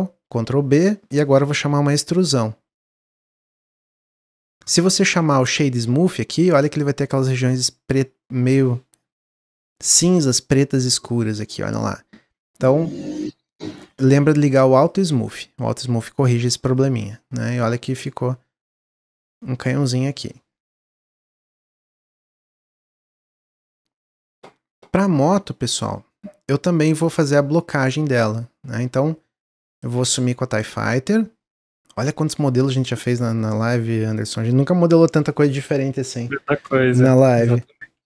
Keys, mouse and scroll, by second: 3.4 click, 4.1 click, 6.7-11.2 middle drag, 13.7 click, 14.7 click, 16.7 drag, 17.3 click, 17.8-18.5 middle drag, 18.5-18.9 scroll down 1, 18.9-19.6 middle drag, 19.6-20.2 scroll down 4, 20.2-21.6 middle drag, 21.6 click, 22.0-25.1 middle drag, 27.0-28.2 drag, 29.8 click, 32.0-33.4 drag, 33.5-36.6 drag.